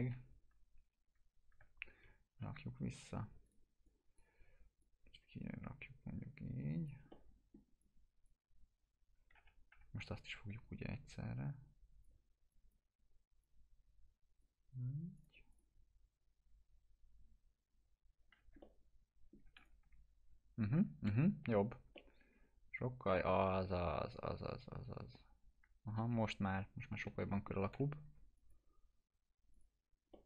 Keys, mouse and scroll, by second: 2.1 1, 2.6 alt+q, 3.5 click, 4.4 w, 4.8-7.0 drag, 7.1-7.8 middle click, 7.8-8.5 drag, 9.4 F3, 10.0-12.2 drag, 12.5-14.7 drag, 18.2-18.5 scroll down 2, 18.6-19.6 alt+middle click, 19.6 click, 19.9 F4, 21.5 scroll down 1, 22.0-27.5 alt+middle drag, 27.8 p, 28.4 click, 30.1 alt+middle click.